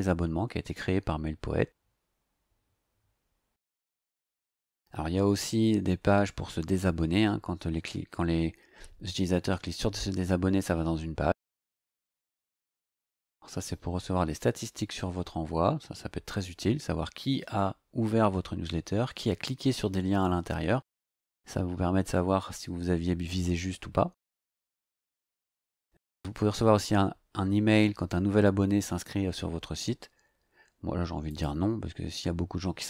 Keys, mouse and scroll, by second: 2.4 scroll down 2, 4.6 scroll down 2, 13.4 scroll down 2, 31.3 click.